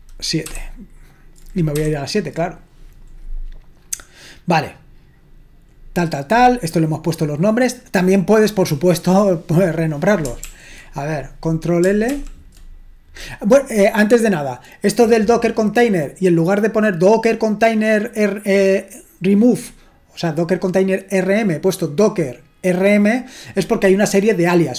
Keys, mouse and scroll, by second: 0.5 super+/, 1.8 super+7, 5.0-6.8 scroll down 3, 6.8-7.9 scroll down 1, 7.9-10.5 drag, 10.5 ctrl+l, 12.1 ctrl+l.